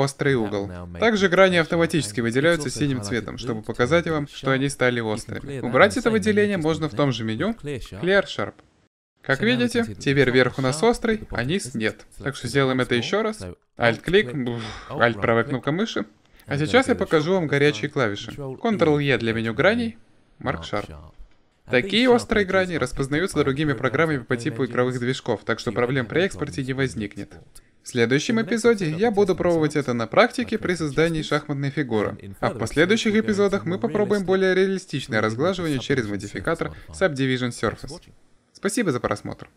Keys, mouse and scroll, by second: 0.6 middle click, 9.1 Tab, 18.7 ctrl+e, 27.6 Tab.